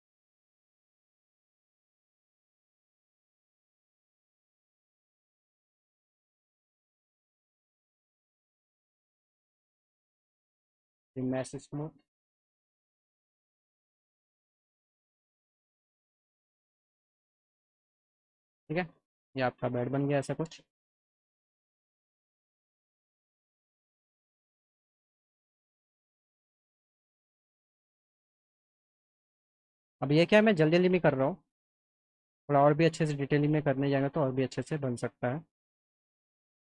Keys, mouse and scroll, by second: 0.8 alt+middle click, 2.2 click, 3.4 click, 3.9 click, 5.2 click, 5.9 alt+middle click, 7.4 click, 7.8 alt+middle click, 8.2 alt+middle click, 8.6 alt+middle click, 9.5 click, 10.7 click, 13.5 click, 14.7-16.1 alt+middle drag, 16.5 click, 17.7 F3, 17.9 F4, 18.4 click, 18.7-20.3 alt+middle drag, 20.7-21.8 alt+middle drag, 22.3 alt+middle click, 22.8 middle click, 27.3 middle click, 28.8 alt+middle click, 29.3 click, 30.3 click, 30.7 click, 33.7 click, 34.3 click, 34.8 click, 35.8 click.